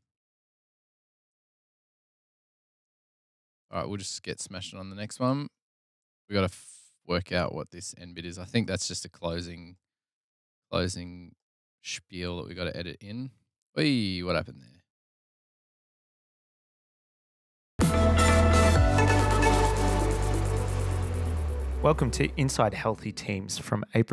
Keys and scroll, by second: 21.0 F7, 21.2 f.